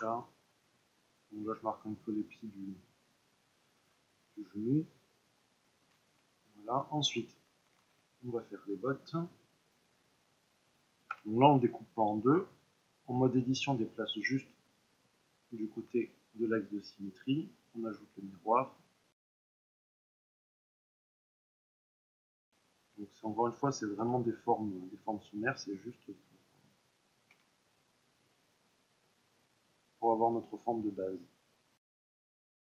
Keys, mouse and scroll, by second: 0.2 middle click, 0.9 click, 1.8-6.1 middle drag, 6.1 Tab, 7.8 shift+a, 9.9 middle click, 11.1 Tab, 13.2-19.3 drag, 19.1 s, 19.4 KP_1, 19.7 click, 20.2 middle click, 20.4 click, 20.7 middle click, 21.0 click, 21.5 middle click, 21.6 click, 21.9 middle click, 22.1 s, 22.4 e, 23.6 click, 23.9 KP_3, 24.9-26.0 middle drag, 26.0-27.3 drag, 27.3 e, 29.3 click, 29.5-30.8 middle drag, 30.8-32.2 drag, 32.2 middle click, 32.5 ctrl+r.